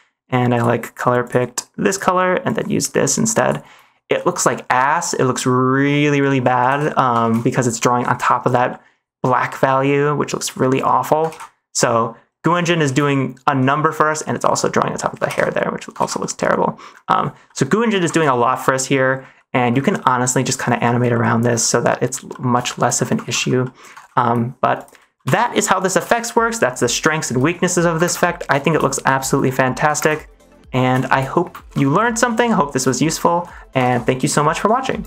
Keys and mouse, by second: 0.4 click, 2.4-3.4 drag, 4.1-5.5 middle drag, 5.8 middle click, 6.7 ctrl+z, 7.3 ctrl+shift+z, 7.4 middle click, 8.6 middle click, 9.6-10.9 middle drag, 11.3 ctrl+z, 11.7 middle click, 12.9 ctrl+shift+z, 13.8 middle click, 14.5 middle click, 15.3 ctrl+z, 15.9 ctrl+s, 16.1 middle click, 17.4 middle click, 18.2 ctrl+s, 18.4 middle click, 19.3 middle click, 20.1 middle click, 21.0 middle click, 22.2 middle click, 22.6 shift+middle click, 23.3 ctrl+s, 23.5 middle click, 24.0 ctrl+s, 24.7 click, 25.1 Delete, 25.5 middle click, 26.0 ctrl+s, 27.0 shift+middle drag, 28.0 ctrl+space, 29.9 ctrl+space, 30.9 shift+middle click, 31.6 ctrl+s, 33.1 shift+middle click, 33.4 middle click, 33.8 ctrl+s.